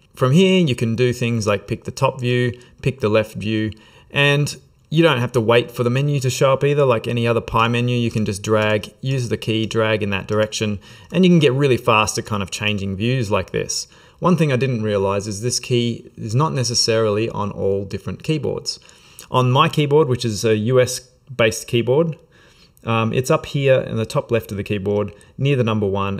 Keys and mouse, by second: 7.6 middle click.